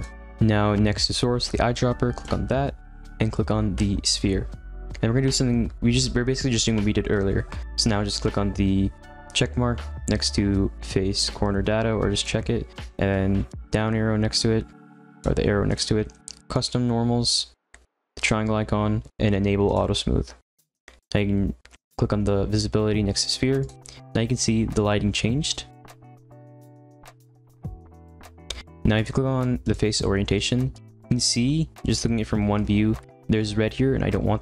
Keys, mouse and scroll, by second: 4.1 click, 12.1 click, 16.5 click, 19.6 click, 23.2 click, 23.8-25.7 middle drag, 25.7-27.3 scroll up 2, 27.3-30.4 drag, 31.8-34.4 middle drag.